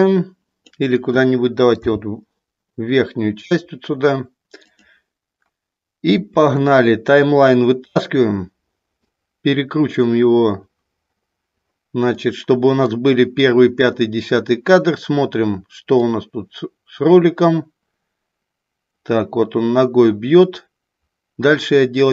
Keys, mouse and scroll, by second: 1.8 g, 8.2-9.3 drag, 12.4 middle click, 16.0-22.1 drag.